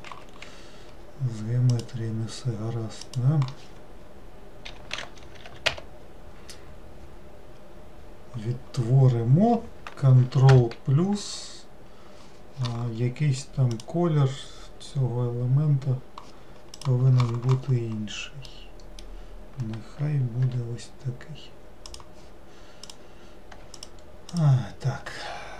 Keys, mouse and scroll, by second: 0.6 Escape, 1.9-4.9 drag, 10.6 ctrl+KP_Add, 18.7-20.6 middle drag, 20.6 g, 23.0 click, 23.9 alt+click, 24.4 alt+click.